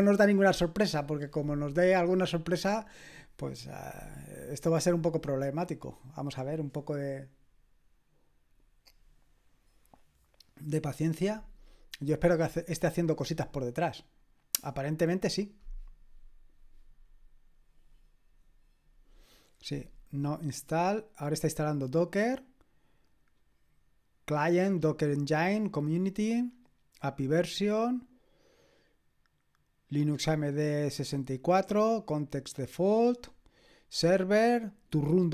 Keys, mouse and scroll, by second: 32.3-35.3 scroll down 1.